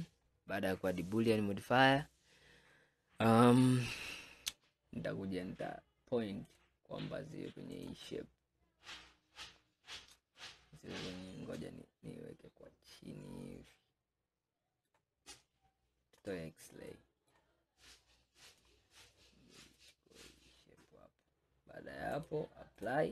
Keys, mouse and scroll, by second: 6.5 click, 9.5-14.8 middle drag, 16.3 click, 17.0-18.5 middle drag, 18.5 click, 22.2-23.1 drag.